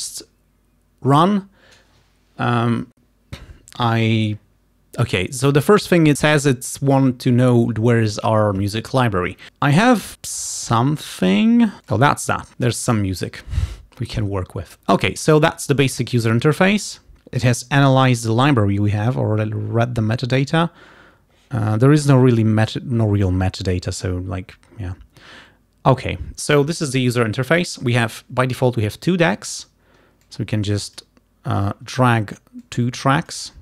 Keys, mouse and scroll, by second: 11.2 click, 12.0 click, 19.1-19.4 scroll down 2, 23.8-24.2 scroll up 2, 30.3-31.3 drag, 32.6 click.